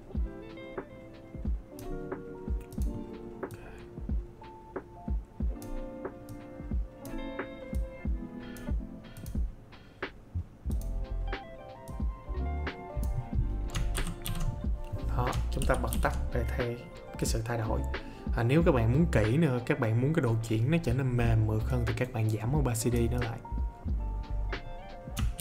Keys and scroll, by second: 13.9 ctrl+d, 25.3 ctrl+d.